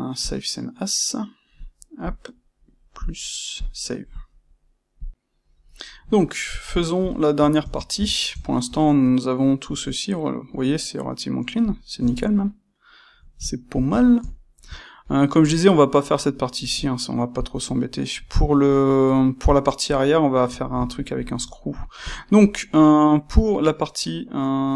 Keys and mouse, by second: 6.0-24.7 middle drag.